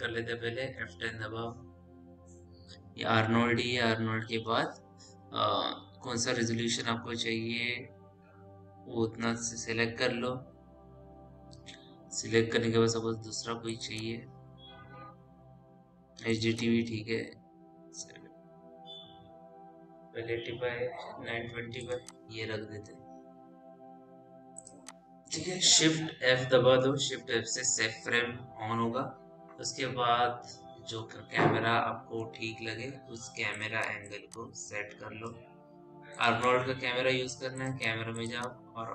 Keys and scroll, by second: 1.1 F10, 27.6 shift+f.